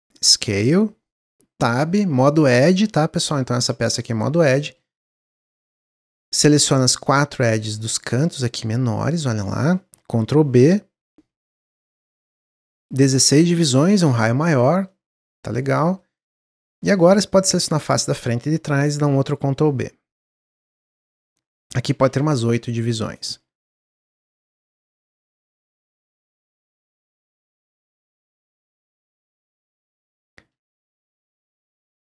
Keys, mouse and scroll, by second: 1.2 Tab, 3.4 click, 4.1 shift+click, 4.4 middle click, 5.2 shift+click, 5.7 shift+click, 6.1 middle click, 6.5 scroll up 2, 6.7-10.3 middle drag, 10.3 ctrl+b, 13.0-14.8 drag, 14.8-16.6 middle drag, 16.6 3, 16.9 click, 17.3-18.0 middle drag, 18.0 shift+drag, 18.2-19.1 middle drag, 19.1 ctrl+b, 20.9-23.0 drag, 23.0 scroll up 1, 23.1 click, 23.3 Tab, 23.5 scroll down 2, 23.8-24.4 middle drag, 24.4 scroll down 1, 24.7-27.8 middle drag, 29.3-32.1 drag.